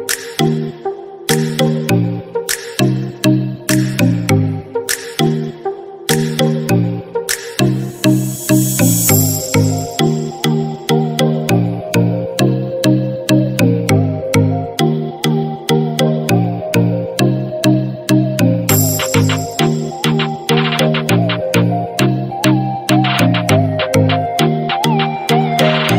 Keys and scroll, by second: 4.2 ctrl+j, 15.1 ctrl+j.